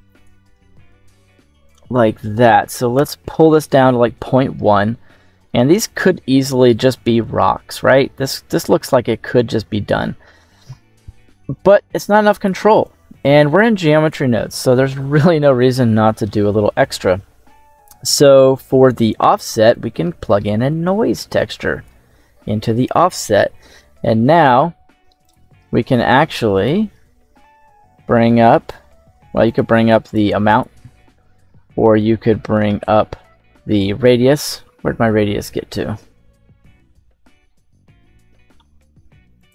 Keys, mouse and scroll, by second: 1.5-2.9 drag, 4.6-7.7 scroll down 1, 7.9 middle click, 9.3-10.5 scroll down 2, 9.6 middle click, 11.6-12.4 drag, 12.7-14.0 drag, 14.3-15.1 scroll up 2, 14.7 middle click, 15.4-15.8 scroll up 1, 15.8 middle click, 19.6-21.8 drag, 25.1 click, 26.4 click, 29.4 click, 29.9 click, 30.4 click, 32.6 middle click, 34.3-38.0 middle drag.